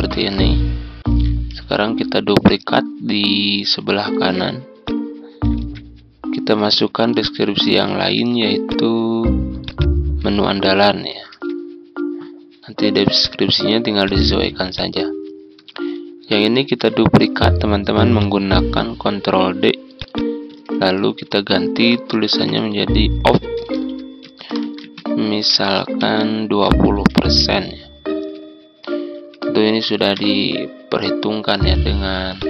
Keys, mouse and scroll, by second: 1.5 ctrl+d, 2.4-5.4 drag, 5.6 Tab, 7.1 click, 8.6 click, 10.6 ctrl+a, 13.1 click, 18.1 click, 20.7 ctrl+a, 22.4-24.2 typing, 25.8-27.1 typing, 26.0 Return, 30.1 shift+5, 32.3 click.